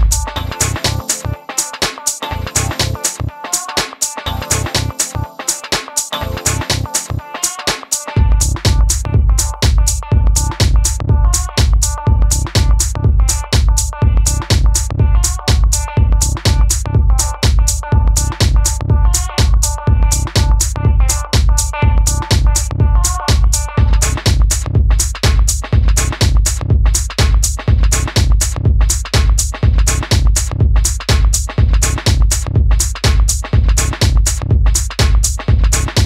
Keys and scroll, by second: 3.9 Home, 28.8 Right, 29.2 Right, 30.0 Down, 30.8 Left, 31.2 Left, 31.4 Right, 32.6 Left, 32.7 Left, 32.9 Up, 33.1 Up, 33.2 Up, 33.3 Up, 33.4 Up, 33.6 Right, 33.7 Right, 33.8 Right, 33.9 Right, 34.0 Right, 34.1 Right.